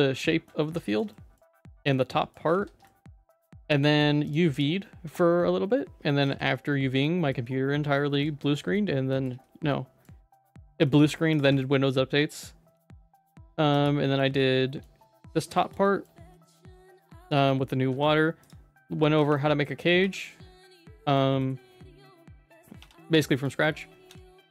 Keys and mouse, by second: 0.2 shift+middle click, 0.6 Tab, 0.8 middle click, 1.1 middle click, 1.6 middle click, 1.9 middle click, 2.5 ctrl+s, 2.8 shift+middle click, 3.8 middle click, 5.0 Tab, 6.2 ctrl+s, 7.0 middle click, 7.7 Tab, 8.0 middle click, 8.4 shift+middle click, 9.1 middle click, 9.7 middle click, 10.5 ctrl+s, 10.8 middle click, 11.6-12.7 shift+middle drag, 13.1 shift+middle click, 13.7 click, 14.0 middle click, 14.4 shift+middle click, 14.9 Tab, 15.5 middle click, 15.8 middle click, 16.3 middle click, 16.9 Tab, 17.5 middle click, 17.9 ctrl+s, 19.1 /, 19.3 middle click, 20.0 /, 20.6 middle click, 21.1 /, 21.4 middle click, 22.7 KP_Divide, 23.2 middle click, 23.6 shift+middle click, 24.1 ctrl+s.